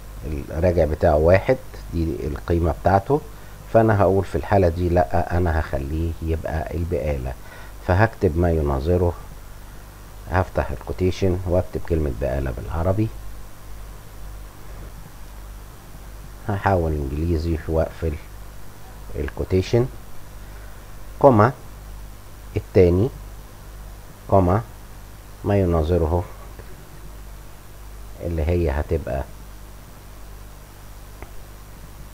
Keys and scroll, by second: 1.2 1, 5.0 ,, 8.6 ., 8.7 /, 11.1 shift+', 14.2-15.2 typing, 17.3 BackSpace, 17.4 k, 19.5 shift+', 21.6 ,, 23.0 2, 24.9 ,, 25.1 /, 25.2 Up, 26.1 shift+Up, 26.2 shift+', 26.3 shift+;, 26.8 shift+', 30.3 Home.